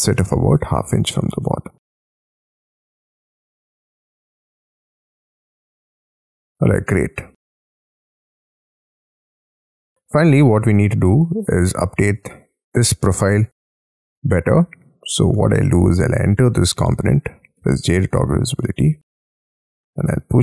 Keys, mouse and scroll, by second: 0.0-0.8 typing, 1.4 Tab, 1.9 middle click, 5.2 middle click, 7.8-8.3 scroll down 3, 8.3 scroll up 6, 8.8 middle click, 9.7 middle click, 10.7 middle click, 12.1 scroll down 4, 12.4-12.9 scroll up 11, 13.6 double click, 14.0 double click, 14.5-15.5 scroll down 7, 15.5 double click, 15.7 double click, 16.2 double click, 17.6 j, 18.1 l, 20.1 space.